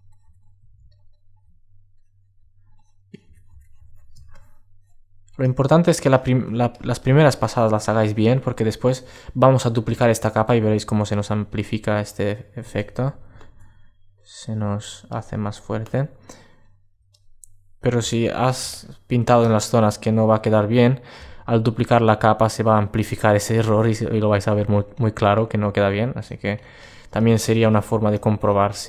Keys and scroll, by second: 12.7 alt+super+z.